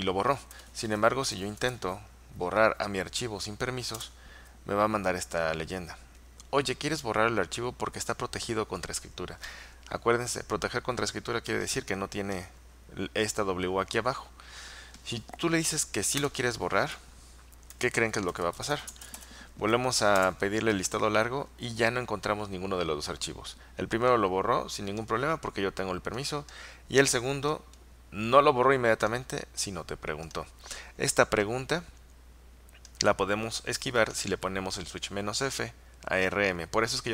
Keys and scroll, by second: 0.6-1.9 typing, 4.1 Return, 4.1 typing, 15.8 typing, 16.3 Return, 17.6-20.8 typing.